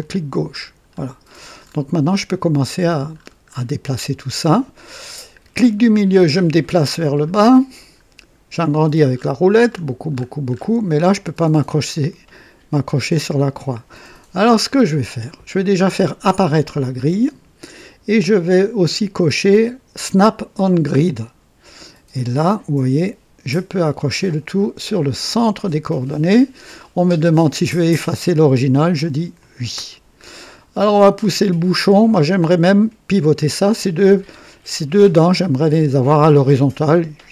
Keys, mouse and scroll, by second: 0.0 click, 0.9-1.9 scroll down 5, 2.7-4.2 scroll down 5, 4.7 scroll down 1, 5.6 middle click, 6.7-7.0 scroll down 1, 7.3 middle click, 8.5-10.8 scroll up 10, 16.2 click, 21.0 click, 25.3 click, 29.4 click, 30.2-31.5 scroll down 4, 32.2 scroll down 2.